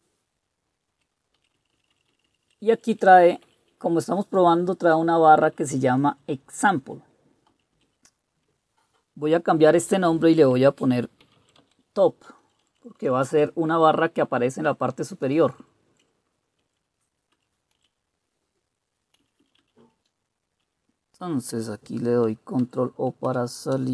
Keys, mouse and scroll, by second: 1.5 Down, 1.9 Down, 2.0 Down, 2.4 Down, 2.6 Down, 2.8 Up, 3.0 Up, 3.2 Up, 3.3-4.1 typing, 5.2-6.1 typing, 6.2 Right, 7.6 Down, 8.0 Up, 11.1-12.2 typing, 12.6 Delete, 12.8 Delete, 12.9 Delete, 13.1 Delete, 15.3 Delete, 15.5-16.0 Delete, 16.7 Right, 17.4 Down, 17.8 Up, 19.3 Down, 19.5 Down, 19.7 Down, 20.1 Down, 20.5 Down, 22.7 ctrl+o, 23.3 Return.